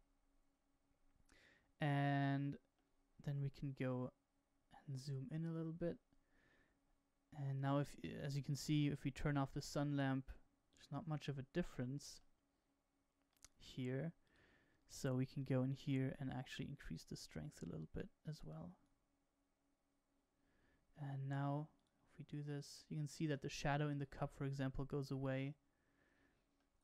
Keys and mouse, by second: 5.8-7.3 middle drag, 9.2 click, 10.6 click, 11.5-12.2 middle drag, 13.2 click, 14.2 click, 15.3 click, 16.6-18.8 drag, 21.7 click, 25.0 click, 26.6-26.8 middle drag.